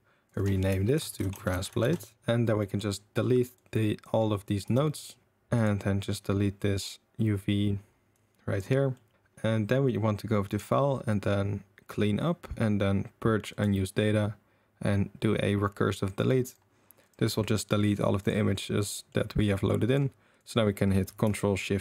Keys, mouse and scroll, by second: 0.3 click, 0.3-2.1 drag, 1.5 s, 2.7 middle click, 3.5 click, 3.7-4.0 drag, 4.6 x, 5.5 click, 8.2 click, 8.9 middle click, 10.5-16.5 drag, 17.0 click, 18.2 click, 18.9 middle click, 19.6 middle click, 20.4 click.